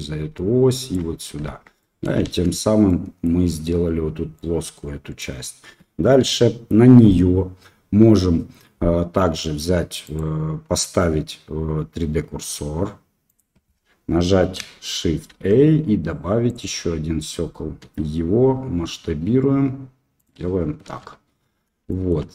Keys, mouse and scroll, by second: 1.4 Tab, 1.7 middle click, 2.2 shift+z, 2.8 middle click, 4.3-5.2 middle drag, 6.2 KP_7, 10.0 click, 15.3 shift+a, 17.8 s, 20.8 KP_1, 21.9 shift+middle drag.